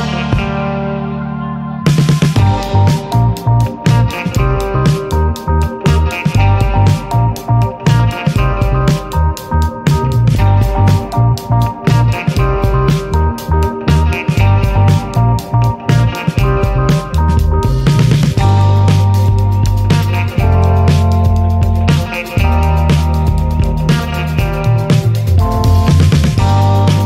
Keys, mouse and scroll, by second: 0.3 click, 2.1 click, 3.6 s, 6.4-7.5 middle drag, 7.5 ctrl+s, 8.9 click, 9.7 scroll down 1, 9.9-10.7 middle drag, 10.5 ctrl+s, 10.7 click, 10.9-11.3 shift+middle drag, 11.3 shift+a, 12.9 alt+middle click, 12.9 alt+middle click, 13.3-13.7 scroll up 4, 13.5 shift+middle drag, 14.5 ctrl+alt+KP_0, 14.9 ctrl+s, 15.5 click, 16.4 click, 16.9 KP_0, 17.2 scroll down 2, 18.0-18.5 scroll down 1, 18.5-18.9 scroll down 1, 19.5-20.2 drag, 21.2-23.2 drag, 23.6 scroll down 1, 24.2 n, 24.7 click, 24.9 n, 26.5 click.